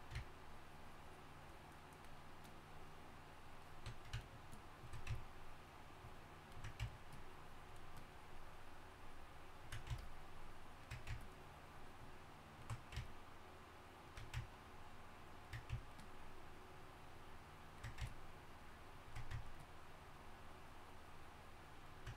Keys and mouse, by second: 0.0-4.3 drag, 7.8-22.1 drag.